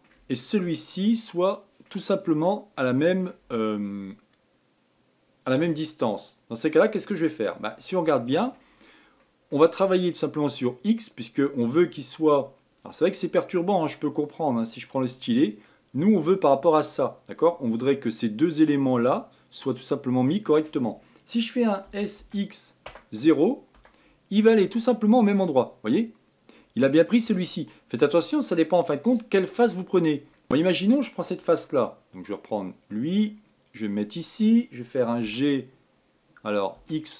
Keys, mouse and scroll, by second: 0.5 shift+click, 1.2-2.5 middle drag, 2.5-2.9 scroll down 2, 2.9-6.0 middle drag, 7.9-8.2 scroll down 1, 8.2 middle click, 8.9-9.3 scroll down 1, 9.3-12.4 middle drag, 14.8-20.5 drag, 22.0 s, 25.0-32.7 middle drag, 32.7 click, 33.1 middle click, 34.0 click, 35.4 g.